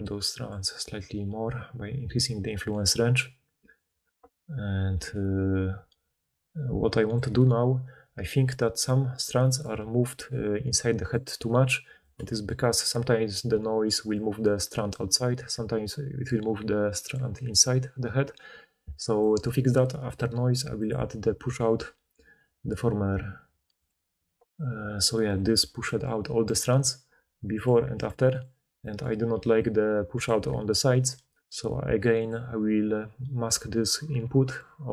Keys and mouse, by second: 0.4-3.8 middle drag, 3.8-5.9 right drag, 5.9-8.8 middle drag, 8.8-10.5 right drag, 9.7 d, 10.1-11.6 d, 10.5-11.5 drag, 12.1 d, 12.2-13.2 drag, 12.2-13.2 middle drag, 12.2-13.2 right drag, 13.2-18.1 d, 19.2 d, 19.4 d, 27.6 click, 28.3-34.9 drag, 29.3 d, 30.2 d, 30.3 d, 31.0 d.